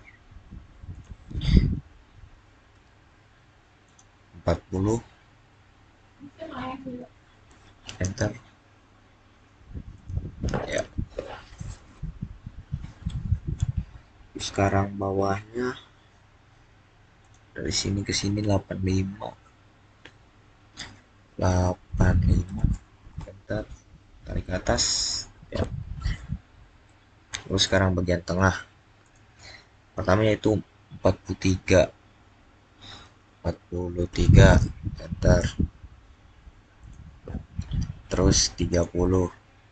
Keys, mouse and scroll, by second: 0.8 click, 3.7 click, 6.7-7.2 typing, 7.7 Return, 9.8 click, 11.9-13.6 scroll down 1, 17.1 click, 21.8 click, 22.1-22.8 typing, 23.0 Return, 24.8 click, 27.0-28.9 middle drag, 28.9 click, 31.1-32.8 scroll up 1, 33.9-34.6 typing, 33.9 scroll up 1, 34.8 Return, 36.7 click.